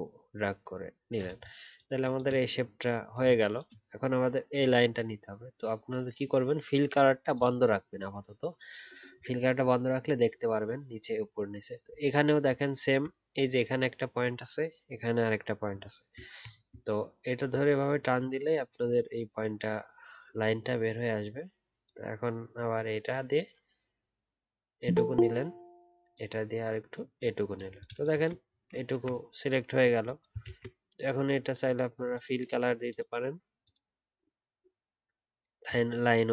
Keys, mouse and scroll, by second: 12.0 alt+scroll up 1, 15.7 alt+scroll down 1, 16.4-17.0 alt+scroll up 1, 30.4 ctrl+z.